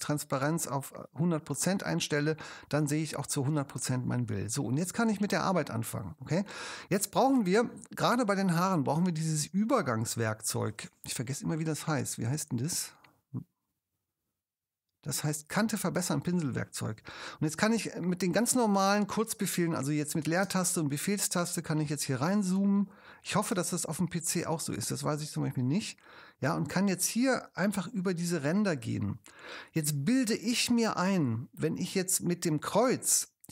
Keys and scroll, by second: 17.8 space, 18.8 space, 19.5 super+space, 20.5 super+space, 23.5 super+space.